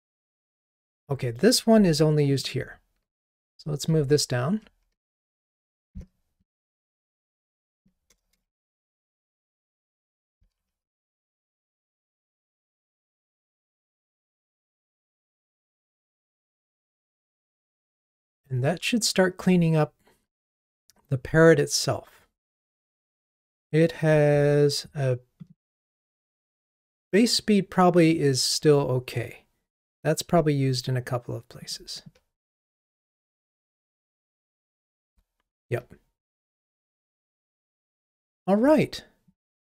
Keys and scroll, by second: 3.9 alt+Up, 5.5 alt+Up, 5.6 super+x, 8.9 super+x, 9.0 super+v, 10.4 ctrl+r, 15.3 ctrl+r, 28.1 super+b, 32.8 super+f.